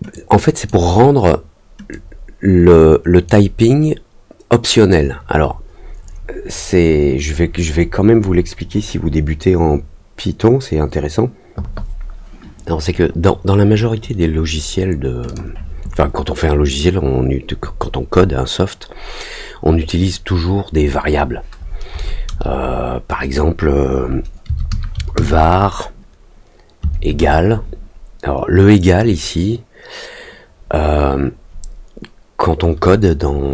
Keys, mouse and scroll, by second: 0.1 click, 1.9-3.2 drag, 15.2 click.